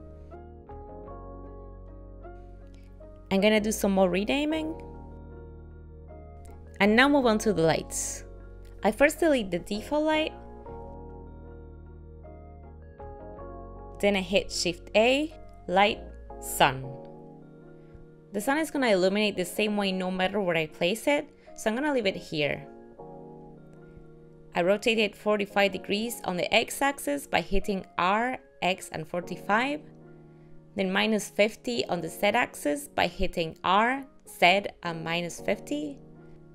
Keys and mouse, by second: 2.4 middle click, 2.6 shift+middle click, 3.0 click, 3.3 click, 3.5 click, 3.9 click, 4.1 click, 4.3 click, 4.5 click, 4.6 click, 5.1 click, 5.2 click, 5.6 click, 5.7 click, 6.0 click, 10.2 click, 11.6 x, 14.2 shift+a, 27.7 r, 33.7 r.